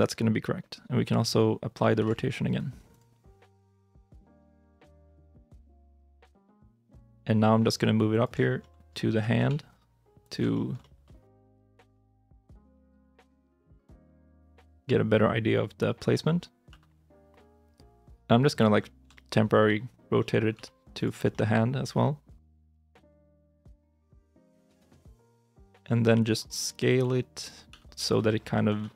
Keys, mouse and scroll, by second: 1.8 ctrl+a, 3.7 scroll down 1, 4.1 shift+middle click, 5.0 middle click, 5.9 g, 6.2 z, 8.2-9.0 shift+scroll, 8.5 middle click, 9.0 g, 9.2 x, 10.4 shift+middle click, 10.7 middle click, 11.8 g, 12.0 y, 14.0 shift+i, 14.3 middle click, 16.5 r, 18.6 middle click, 19.0 shift+middle click, 19.4 scroll up 1, 19.5 middle click, 19.9 scroll up 1, 20.1 middle click, 20.4 g, 21.1 scroll down 1, 21.2 middle click, 22.6 s, 23.8 middle click, 24.4 g, 25.3 middle click, 25.7 shift+middle click, 26.0 scroll up 1, 26.9 g, 27.6 s, 28.5 r, 28.6 y.